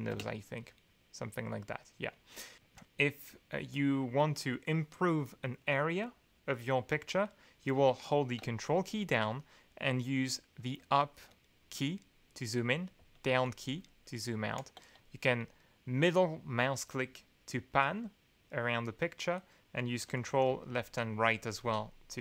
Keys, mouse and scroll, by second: 0.1 space, 10.8 ctrl+Up, 11.8 ctrl+Up, 12.7 ctrl+Down, 13.7 ctrl+Up, 16.1-19.0 middle drag, 20.2 ctrl+Left, 20.5 ctrl+Right, 21.0 ctrl+Left, 21.6 ctrl+Right.